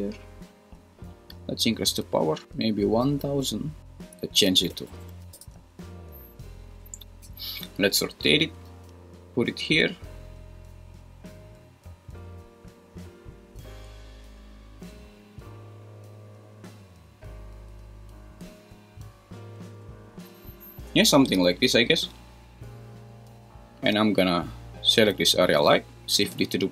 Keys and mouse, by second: 1.9 click, 2.4 super+z, 2.5-3.8 drag, 3.2 0, 3.8 Escape, 4.3-5.5 drag, 4.9 0, 5.0 0, 7.2 r, 8.7 g, 12.0 g, 13.6 click, 14.0 r, 25.1 g, 25.6 Escape, 26.4 shift+d.